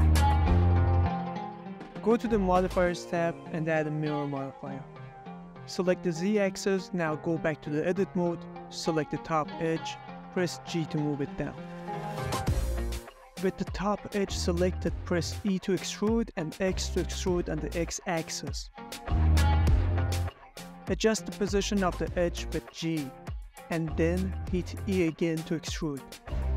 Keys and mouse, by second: 0.0-2.3 right drag, 3.6-4.9 drag, 6.0 click, 6.9-8.0 middle drag, 8.7 Tab, 10.8 middle click, 11.9 g, 12.1 z, 14.3 middle click, 15.4 ctrl+middle click, 15.6 middle click, 16.8 e, 16.9 x, 17.3 y, 22.6 click, 22.9 middle click, 23.3 g, 23.3 Escape, 23.5 z, 26.5 click.